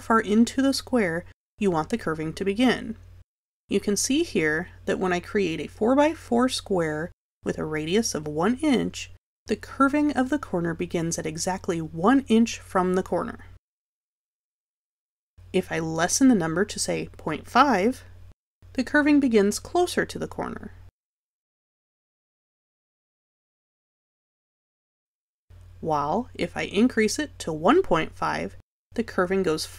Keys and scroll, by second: 17.8 KP_Decimal, 17.9 5, 27.9 5.